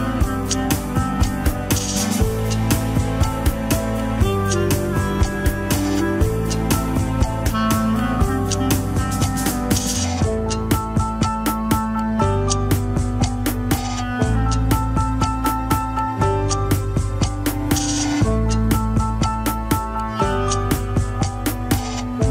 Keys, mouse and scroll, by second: 10.8 alt+r, 11.2 alt+g, 11.5-11.9 shift+middle drag, 11.9-13.1 scroll up 1, 13.1-13.6 drag, 16.8 click, 17.3-17.8 scroll up 1, 17.8 click.